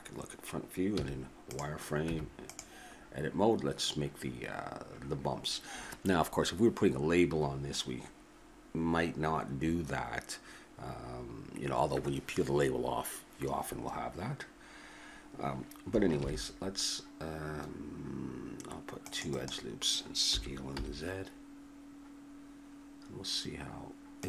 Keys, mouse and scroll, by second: 1.0 z, 2.1 Tab, 16.2 ctrl+r, 20.3 s.